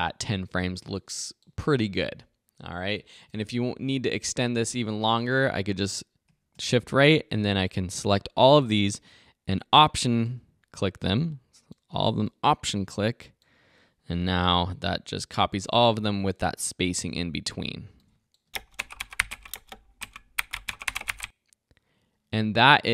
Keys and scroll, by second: 4.4 Right, 6.3 shift+Right, 14.7 alt+-, 18.5 space, 22.1 space.